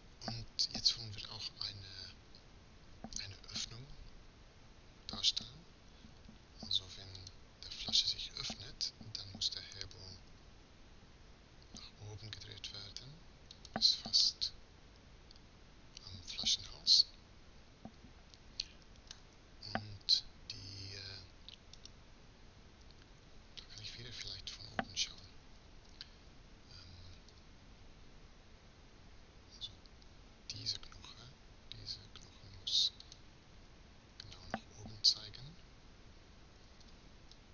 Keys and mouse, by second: 10.0 r, 13.9-16.0 middle drag, 22.2-23.2 right drag, 24.8 KP_7, 26.8 r, 36.2 r.